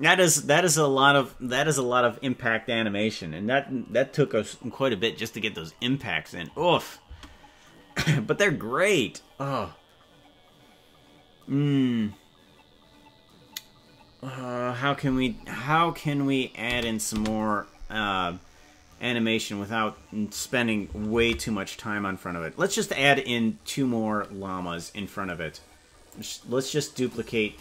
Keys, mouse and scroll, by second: 7.1 space, 16.7 space, 17.1 space, 23.0 ctrl+s, 26.0 click.